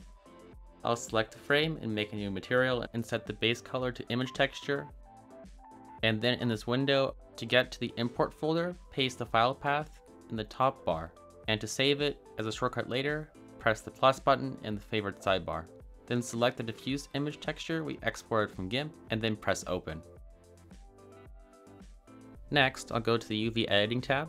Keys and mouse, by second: 0.1-2.0 drag, 2.4 drag, 3.5 click, 3.7-5.9 drag.